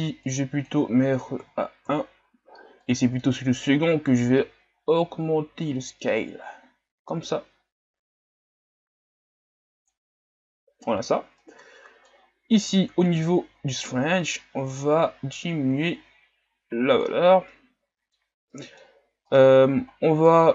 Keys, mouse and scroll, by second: 2.0-7.1 drag, 13.3-16.1 drag, 17.6-20.5 middle drag.